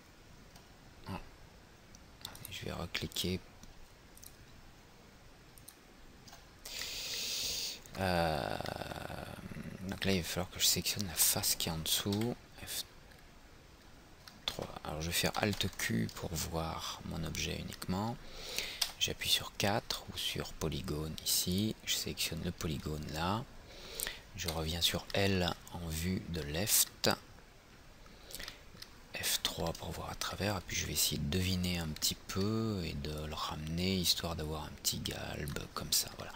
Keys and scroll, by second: 12.2 F3, 15.7 alt+q, 29.4 F3.